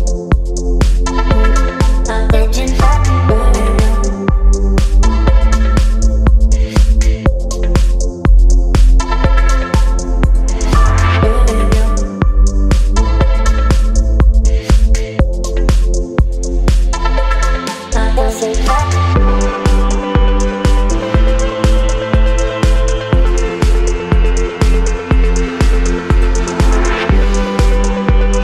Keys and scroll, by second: 0.9 space, 11.9 space, 15.2 space, 20.5 space, 25.5 Delete, 26.9 x.